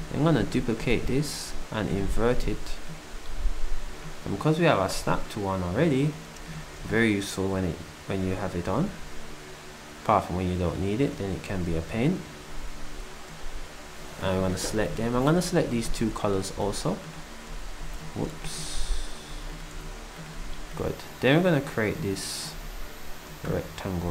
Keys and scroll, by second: 15.1 d, 16.5 d, 18.0-20.8 typing, 22.0-22.5 typing.